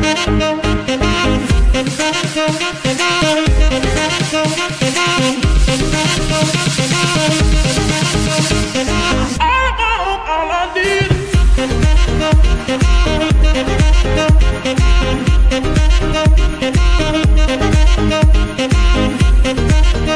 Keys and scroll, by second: 6.8 g, 8.7 KP_1, 12.5 KP_3, 14.6 y.